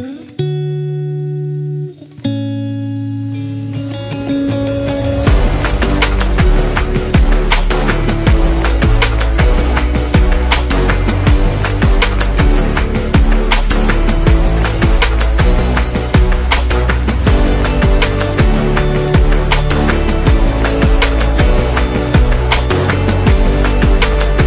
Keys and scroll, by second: 0.2-6.2 typing, 10.1 z, 10.9 v, 18.1-19.1 typing.